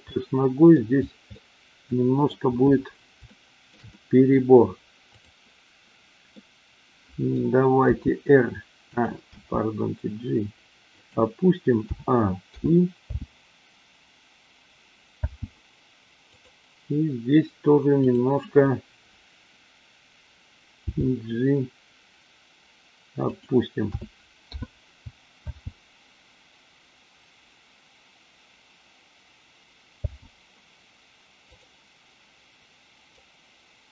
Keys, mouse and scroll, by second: 0.1-0.7 middle drag, 1.4-2.4 middle drag, 3.2-3.6 shift+middle drag, 3.8 middle click, 6.2-7.4 middle drag, 7.9 r, 9.2 g, 11.9 a, 12.6 i, 13.1 space, 15.1 space, 16.2 click, 20.8 g, 23.4 click, 23.8 a, 24.5 i, 25.5 space, 30.0 space, 31.5 click, 33.1-33.9 drag.